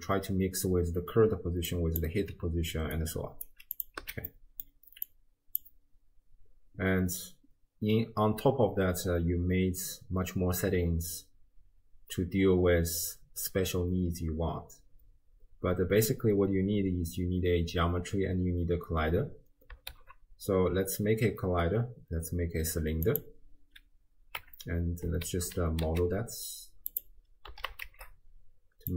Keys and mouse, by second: 1.3-2.2 d, 1.7 click, 2.7 d, 3.0 click, 3.8 click, 3.8 d, 4.0 x, 4.3 middle click, 5.0 click, 19.9 shift+a, 24.4 Tab, 25.1 s, 27.5 s.